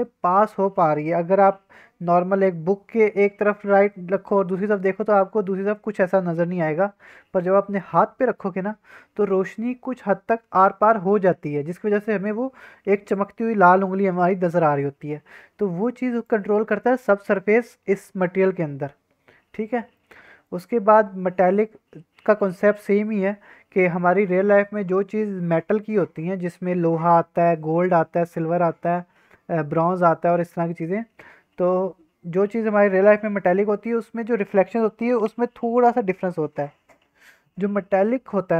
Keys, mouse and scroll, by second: 16.1-17.1 drag, 17.9-18.5 scroll down 3, 18.5-19.7 scroll up 7, 19.7 middle drag, 20.1-22.3 scroll up 3, 20.4 middle click, 23.1-23.6 scroll down 1.